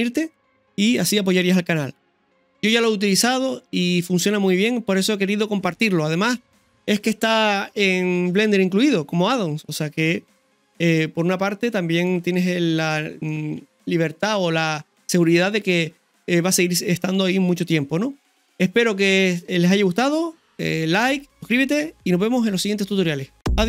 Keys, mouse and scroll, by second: 1.2 scroll down 1, 9.7 scroll up 1, 10.4-12.1 middle drag, 13.3 middle click.